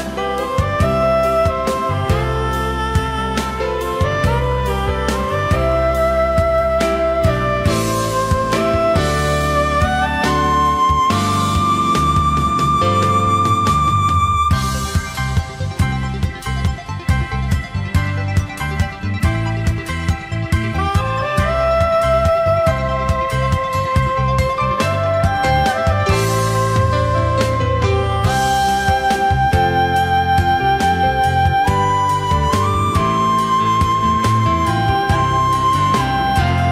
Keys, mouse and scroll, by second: 0.7 alt+scroll down 1, 0.9 space, 2.8 alt+scroll up 1, 4.4 space, 5.6 alt+scroll up 1, 8.4 alt+click, 9.6 alt+shift+click, 10.3 alt+scroll up 1, 12.1 shift+click, 13.5 alt+scroll down 1, 13.7 space, 14.6 alt+click, 15.4 space, 16.2 alt+scroll up 1, 17.6 shift+click, 18.2 alt+scroll down 1, 19.1 alt+click, 20.3 alt+scroll up 1, 20.8 space, 22.7 ctrl+shift+a, 23.0 alt+scroll down 1, 23.1 space, 24.2 alt+scroll up 1, 25.1 shift+click, 25.9 alt+scroll down 1, 26.7 alt+click, 27.4 space, 28.3 alt+click, 29.5 alt+scroll up 1, 30.2 shift+click, 31.5 ctrl+shift+a, 31.8 alt+scroll down 1, 32.9 alt+scroll down 1, 33.2 space, 33.9 alt+scroll up 1, 34.6 space, 36.6 alt+scroll up 1.